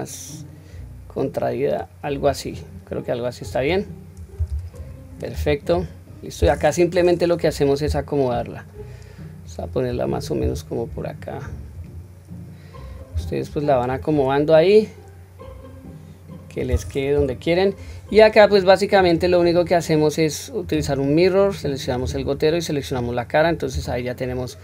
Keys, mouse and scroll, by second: 3.4 click, 4.4 Tab, 5.3 q, 5.6-6.3 scroll down 1, 6.5-7.4 scroll down 1, 7.8 g, 14.1-16.5 middle drag, 17.1 KP_1, 17.4-19.0 scroll down 1, 19.0-20.7 drag, 19.0 scroll down 1, 21.8 click, 23.4-23.8 scroll down 2, 23.7 click, 24.2-24.6 scroll up 1.